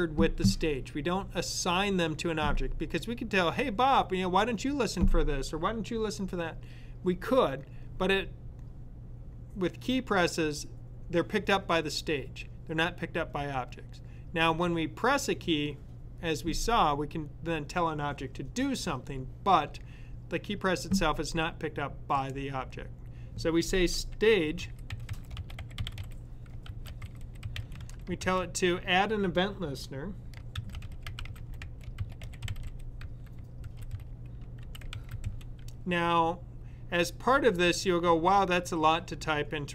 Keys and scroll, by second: 24.0-28.5 typing, 30.2-35.6 typing.